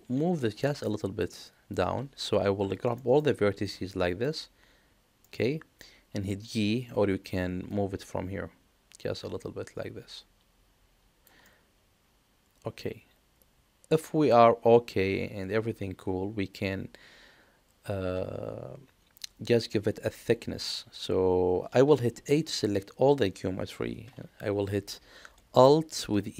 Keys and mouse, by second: 2.9 middle click, 3.6 click, 5.2 middle click, 7.6-11.2 drag, 11.4-21.9 middle drag, 22.2 a, 26.0 alt+e.